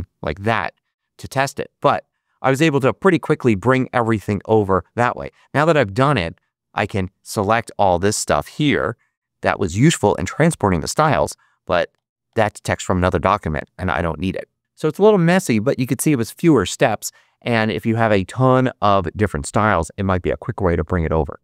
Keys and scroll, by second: 11.1 BackSpace.